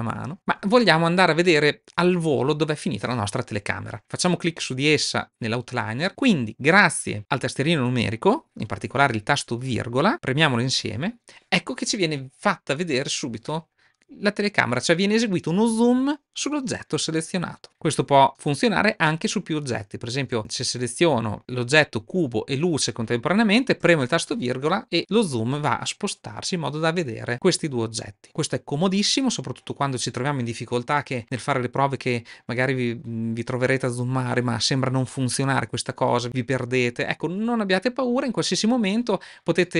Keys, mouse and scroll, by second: 19.7 shift+click, 20.8-21.4 drag, 23.6 KP_7, 39.6 click.